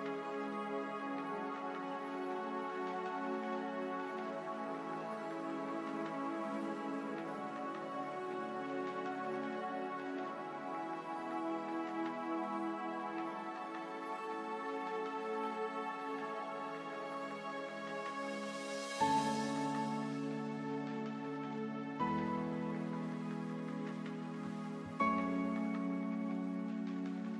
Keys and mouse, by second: 1.8 middle click, 2.0 KP_Divide, 3.3 a, 3.6 a, 5.0 ctrl+n, 5.6 Tab, 6.4 Tab, 7.7 a, 9.3 ctrl+Tab, 11.3 KP_1, 11.8 z, 13.0 b, 14.8 x, 16.9 z, 17.6 Tab, 20.5 Tab, 25.4 ctrl+Tab.